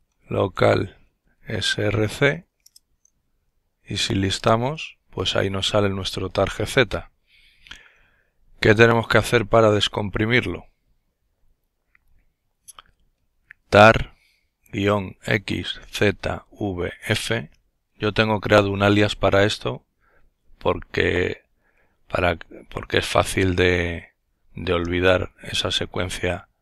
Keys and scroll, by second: 0.0-4.4 typing, 1.8 Return, 3.6 Return, 11.8-16.2 typing, 24.1-24.8 typing, 26.2-26.6 typing.